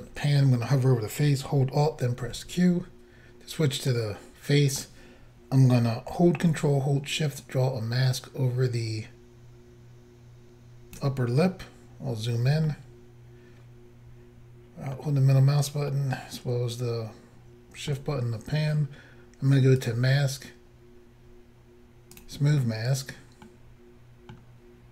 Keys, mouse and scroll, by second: 2.3 alt+q, 3.9 middle click, 12.0 scroll up 2, 12.7 shift+middle click, 16.0 shift+middle click, 19.8 click, 19.9 click, 22.2 click, 22.3 click, 23.5 middle click.